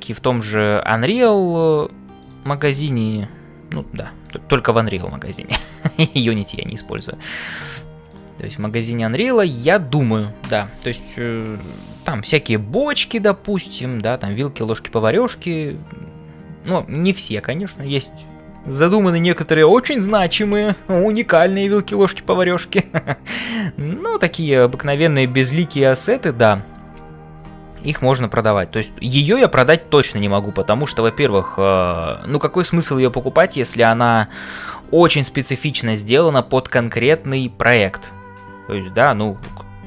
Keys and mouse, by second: 0.0-39.8 typing, 4.9 click, 5.4 middle click.